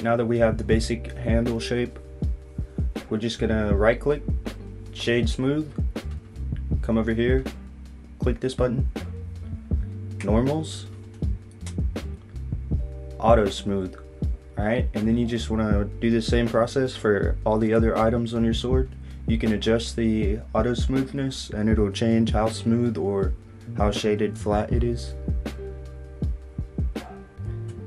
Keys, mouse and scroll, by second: 4.9 right click, 10.1 click, 12.7 click, 14.1 click, 15.2 middle click, 17.2 click, 21.1 click, 25.4-26.0 scroll up 3, 26.0 click, 26.6 right click.